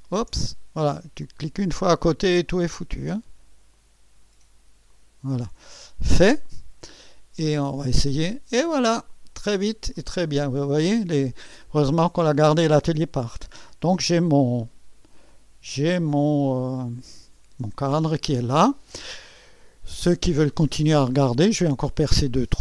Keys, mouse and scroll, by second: 1.2-3.1 drag, 3.7 click, 4.7-5.9 drag, 6.3 click, 7.6 click, 9.1-11.5 drag, 11.5-12.0 scroll up 1, 11.6 click, 12.0-13.3 scroll down 1, 13.3 click, 15.0 click, 17.3 click, 17.4-18.6 typing, 18.3-19.2 scroll up 1, 19.2-21.3 middle drag, 19.2 scroll up 1.